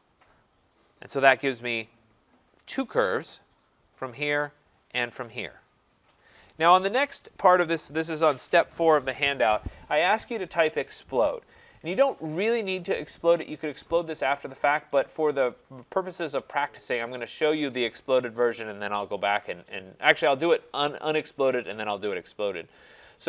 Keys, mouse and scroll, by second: 0.9 right click, 1.4-1.9 scroll, 1.9 scroll, 2.0 click, 3.0 right click, 4.0 click, 5.0 click, 5.8 click, 16.0 click.